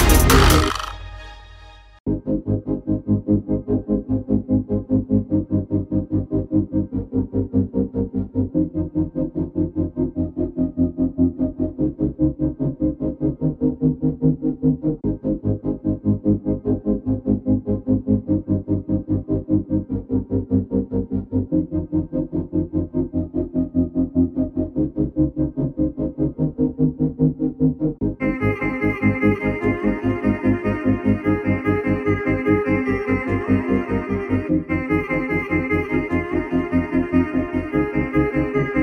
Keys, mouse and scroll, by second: 1.1 ctrl+z, 1.3 ctrl+z, 1.5 ctrl+z, 1.9 ctrl+z, 2.6 click, 2.9 alt+scroll up 1, 3.5 alt+scroll down 1, 4.2-4.6 alt+scroll up 1, 5.3 click, 6.6 alt+click, 8.0 alt+shift+click, 9.2 alt+shift+click, 10.5 click, 12.0 alt+click, 12.9 shift+Up, 13.3 shift+Up, 13.5 shift+Up, 14.2 shift+Up, 14.4 shift+Down, 15.5 click, 19.1 click, 20.7 click, 24.9 alt+scroll up 1, 25.2 alt+scroll down 1, 26.1 click, 28.0 click, 29.1 8, 29.3 0, 29.9 click, 35.7 click.